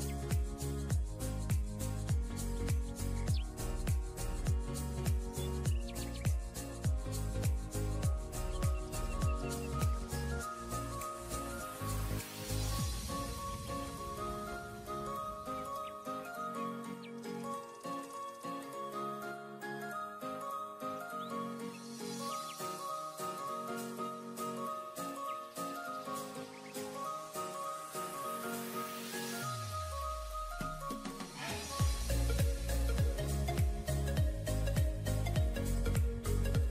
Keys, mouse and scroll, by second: 6.8-7.8 typing, 10.1 typing, 11.8-13.5 typing, 15.0 scroll up 1, 16.0-16.5 typing, 16.1 scroll down 1, 17.8 typing, 19.9 scroll down 1, 20.3 typing, 26.2-27.0 typing, 31.2-32.9 typing, 32.6 ctrl+scroll down 1, 34.1 typing.